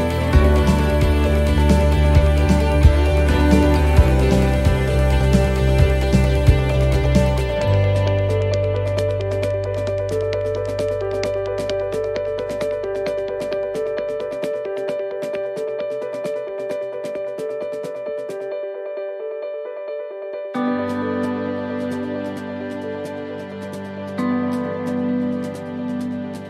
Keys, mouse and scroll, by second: 0.8 right click, 2.4 right click, 2.4 l, 3.3 click, 4.6 middle click, 7.0-7.6 scroll down 2, 7.3 middle click, 10.3-11.3 l, 11.5-13.0 l, 13.0 middle click, 13.4 scroll down 1, 14.8-15.5 scroll down 1, 14.8 l, 15.5 l, 16.1 middle click, 17.1 shift+d, 18.8-26.4 click.